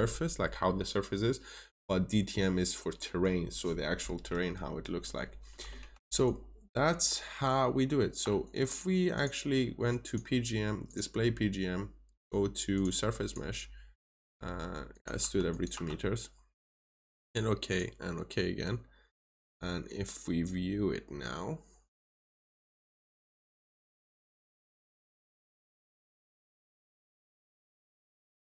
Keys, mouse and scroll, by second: 4.4-4.8 scroll down 1, 5.0 middle click, 6.1 ctrl+shift+click, 9.0 click, 15.1 2, 15.4 click, 15.6 2, 16.6 click.